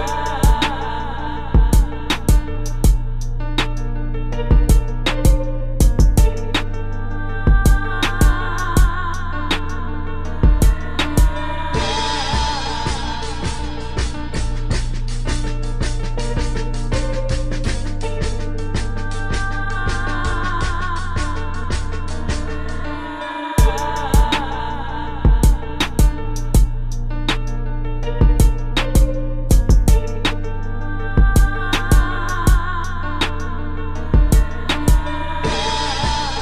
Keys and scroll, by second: 0.2 space, 1.2 space, 1.9 space, 2.5 space, 2.9 space, 4.2 space, 5.7 space, 7.4-11.2 typing, 13.1 space, 15.0 space, 15.6 space, 17.6 space, 18.0 space, 18.5 space, 19.7 space, 20.3 space, 21.0 space, 24.3 space, 24.5 space, 26.8 space, 27.3 space, 27.7 space, 29.5 space, 30.0 space, 32.1 space, 32.9 space, 33.4 space.